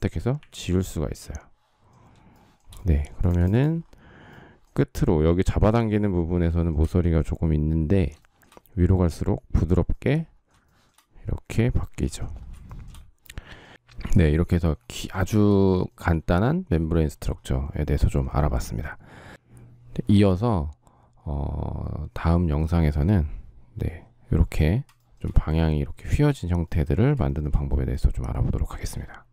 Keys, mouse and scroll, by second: 0.1 Delete, 1.8 shift+scroll, 2.0 shift+middle click, 6.4 shift+middle click, 10.3 shift+middle click, 12.4 shift+middle click, 14.8 shift+middle click, 24.6 shift+middle click, 26.9 shift+middle click.